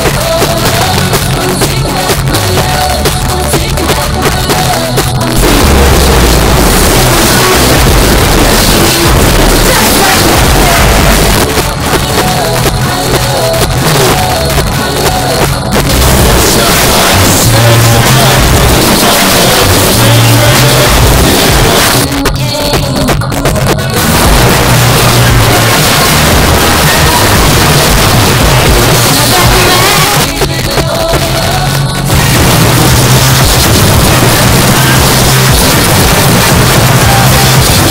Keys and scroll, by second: 1.0 Down, 1.2 Down, 1.3 Down, 1.8 Down, 2.0 Down, 2.1 Return, 11.3 Page_Down, 21.9 Page_Down, 30.0 Page_Down.